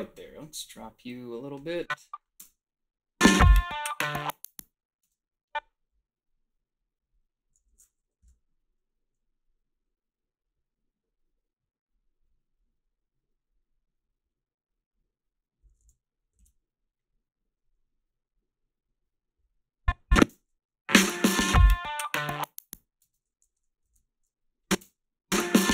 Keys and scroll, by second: 2.4 space, 5.0 space, 8.2 p, 15.8 ctrl+z, 16.4 ctrl+z, 20.3 space, 23.0 space, 23.4 a, 23.9 ctrl+b, 24.8 space, 25.6 ctrl+b.